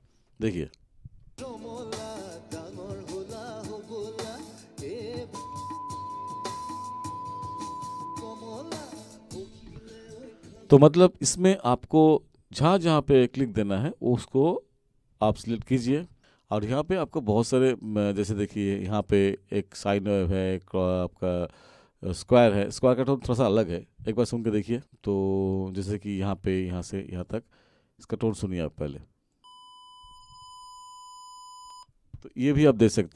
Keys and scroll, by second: 1.2 space, 10.6 space.